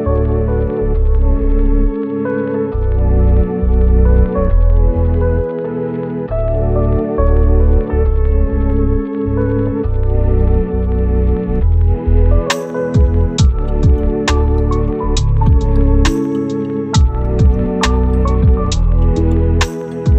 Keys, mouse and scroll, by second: 0.5 scroll down 1, 0.7 right click, 1.2 scroll up 1, 1.3 right click, 1.7-2.2 scroll up 1, 2.2 right click, 2.6 scroll down 1, 3.0 right click, 3.5 scroll down 1, 3.6 scroll up 1, 3.7 right click, 4.7 scroll up 1, 4.9 right click, 7.5 scroll down 1, 7.7 right click, 8.0-8.6 scroll up 2, 8.2 right click, 8.6 right click, 9.0-9.6 scroll up 2, 9.1 right click, 9.6 right click, 9.8 scroll down 1, 9.9-10.4 scroll up 2, 10.0 right click, 10.4 right click, 11.0-11.7 scroll down 2, 11.2 right click, 11.7 scroll up 1, 11.9 right click, 13.3 click, 15.3 right click, 15.4 scroll down 1, 15.6 right click, 16.3 scroll down 1, 16.4 scroll up 1, 16.9 right click, 17.7 scroll up 1, 17.9 right click, 18.2-18.6 scroll down 1, 18.6 right click, 18.8 scroll down 1, 19.0 click, 19.9 scroll up 1, 20.0 right click.